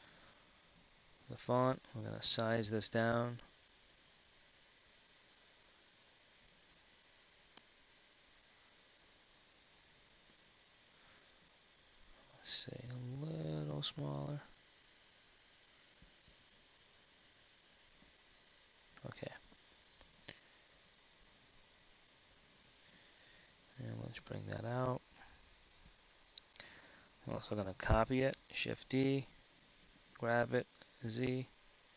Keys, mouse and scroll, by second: 2.1 s, 13.6 s, 18.3 z, 19.4 KP_1, 20.5 z, 22.7 KP_3, 24.4-27.1 drag, 28.6 shift+d.